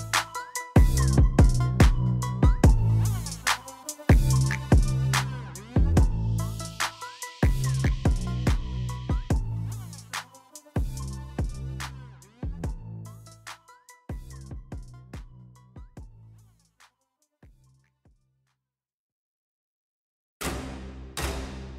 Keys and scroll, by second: 1.7 ctrl+r, 6.9 3, 10.0 /, 13.4 ctrl+r, 13.6 1, 15.1 g, 17.1 ctrl+b, 20.6 ctrl+r.